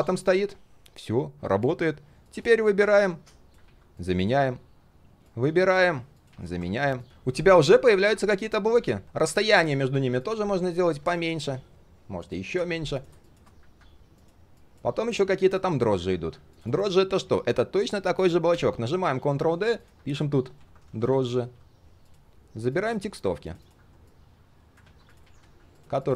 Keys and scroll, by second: 3.6 ctrl+x, 4.0 ctrl+a, 4.2 ctrl+shift+v, 5.8 ctrl+x, 6.3 ctrl+a, 6.4 ctrl+shift+v, 18.5 ctrl+d, 24.8 ctrl+x, 25.2 ctrl+a, 25.4 ctrl+shift+v.